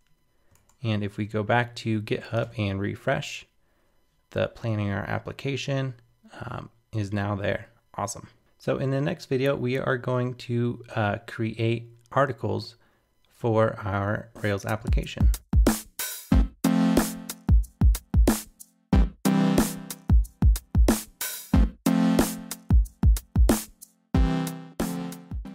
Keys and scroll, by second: 2.4 super+r.